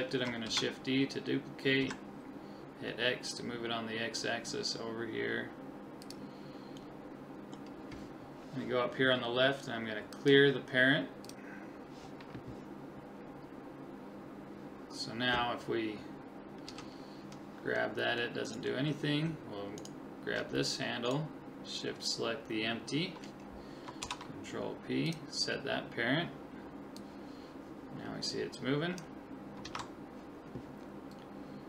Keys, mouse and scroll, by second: 0.5 shift+d, 6.8-8.7 middle drag, 10.1 click, 16.7 g, 19.8-23.0 right drag, 24.0 ctrl+p, 27.0 click, 29.8 ctrl+z.